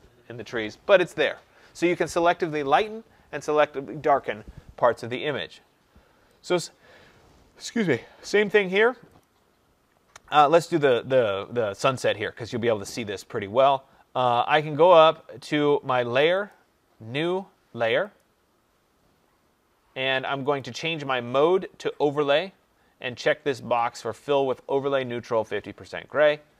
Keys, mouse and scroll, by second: 6.4 click, 9.1 click, 16.4 click, 18.1 click, 20.5 click, 22.2 click, 23.8 click.